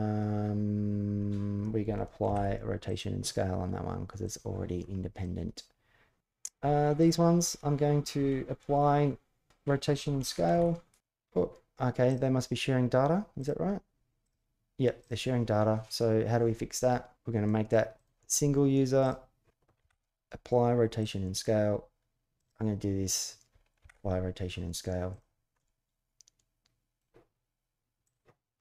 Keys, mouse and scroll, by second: 2.0 ctrl+a, 5.0-5.9 middle drag, 6.7 shift+click, 10.3 ctrl+s, 10.7 ctrl+z, 10.7 ctrl+a, 11.8-12.6 drag, 13.1 click, 14.0 click, 14.8 click, 17.8-18.2 drag, 18.8 click, 19.5 ctrl+a, 22.1 click, 23.6 ctrl+a, 25.3-26.8 middle drag, 28.4-28.6 middle drag.